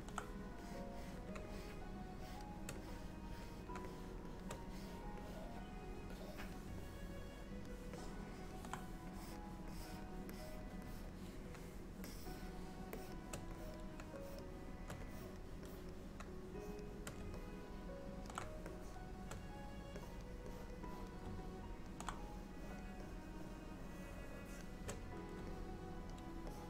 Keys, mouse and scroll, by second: 0.7 click, 1.6 click, 2.3 shift+click, 2.9 click, 3.9 shift+click, 4.4 shift+click, 4.8 click, 5.3 click, 6.3 click, 6.6 shift+click, 6.9 middle click, 8.0 middle click, 9.2 click, 9.9 click, 10.4 click, 10.9 click, 12.1 shift+click, 13.0 shift+click, 13.3 shift+click, 13.6 click, 14.3 shift+click, 15.2 click, 15.7 click, 16.2 shift+click, 16.7 shift+click, 17.5 middle click, 18.8 shift+click, 20.0 click, 20.6 click, 20.9 click, 21.3 shift+click, 21.5 middle click, 22.2 shift+click, 22.3 shift+click, 22.7 click, 24.5 shift+click, 25.6 middle click, 26.6 shift+middle click.